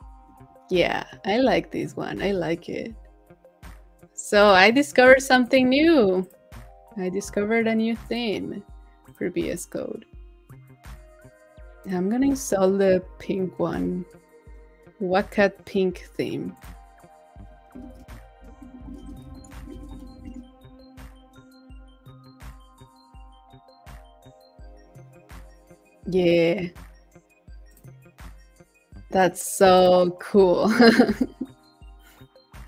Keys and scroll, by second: 19.8 super+a.